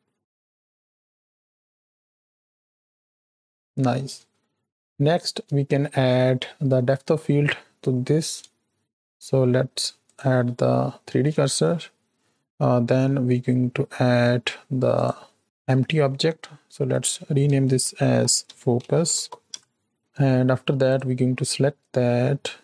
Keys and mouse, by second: 0.4 click, 1.1 click, 2.0 shift+click, 2.8 shift+drag, 3.4 shift+click, 5.0 shift+click, 5.0-5.4 shift+middle drag, 10.0 click, 12.7 shift+a, 15.4 click, 16.7 F2, 20.8 click.